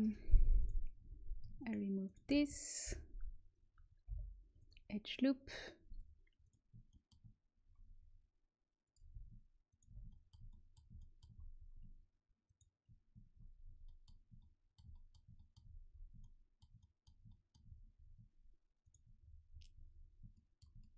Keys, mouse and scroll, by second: 0.5-3.7 right drag, 2.8 Delete, 4.0 Delete, 5.8 click, 6.4 middle click, 6.8 click, 6.8 right click, 7.5-8.9 middle drag, 8.9-10.7 drag, 9.6-10.7 right drag, 10.0-15.5 middle drag, 17.9 right click, 18.8 click, 18.9-20.3 right drag, 20.3-20.9 middle drag.